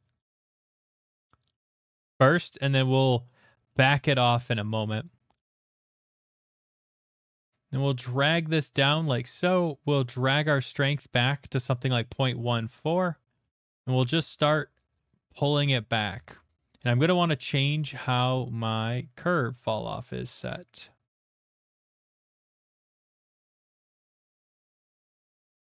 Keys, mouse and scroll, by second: 0.0 click, 0.2 click, 0.5 click, 0.7 click, 1.1 click, 1.5 middle click, 1.8 middle click, 2.0 shift+middle click, 2.4 click, 2.4 shift+middle click, 2.8 click, 3.7 middle click, 4.1 middle click, 4.4 shift+middle click, 4.6 middle click, 5.0 click, 5.4 click, 6.3 click, 6.3 middle click, 9.0 click, 9.8 click, 10.5-12.5 drag, 13.5 ctrl+z, 13.8 ctrl+z, 14.5 click, 15.0 click, 15.5 ctrl+z, 16.1 ctrl+z, 16.7-18.0 scroll, 18.6-19.9 scroll, 21.3 middle click, 21.3 click, 21.7 click, 21.9 middle click, 21.9 click, 22.3 click, 22.5 ctrl+z, 23.1 ctrl+z, 23.2 click, 23.3 click, 23.5 ctrl+z, 23.8 click, 23.9 click, 24.1 click, 24.3 click, 24.4 ctrl+z, 24.6 ctrl+z, 24.8 ctrl+z, 25.0 click, 25.2 click, 25.3 click, 25.5 click, 25.6 click.